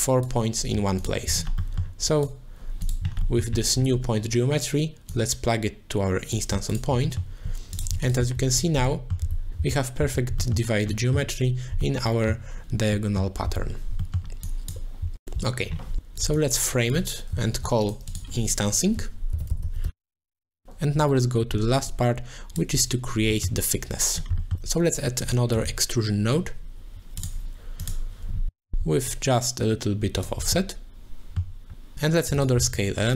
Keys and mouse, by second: 0.0 click, 1.0 alt+shift+click, 1.7 middle click, 2.1 click, 3.4 middle click, 5.1-6.3 drag, 6.7 alt+shift+click, 7.2 middle click, 7.7 alt+shift+click, 8.2-9.6 z, 8.9 middle click, 10.0 z, 10.4 middle click, 10.9 middle click, 11.8 middle click, 12.9 middle click, 13.4 z, 14.0 middle click, 14.4 click, 14.7 click, 16.0 click, 16.4 click, 17.5 ctrl+j, 17.8 click, 18.1 click, 18.6 F2, 20.6 middle click, 21.3 click, 22.4 middle click, 24.5 shift+a, 29.1-30.2 shift+drag, 30.5 middle click, 32.3 click, 32.8 shift+a.